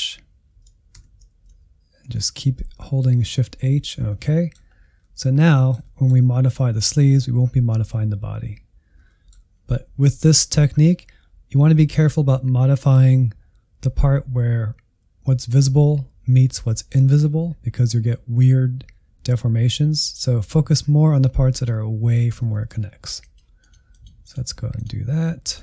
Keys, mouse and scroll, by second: 0.9 shift+h, 2.1 shift+h, 2.7-4.7 middle drag, 4.7 scroll up 1, 5.0-10.7 middle drag, 10.7-13.8 scroll up 1, 22.5 shift+middle click, 23.2-25.6 drag.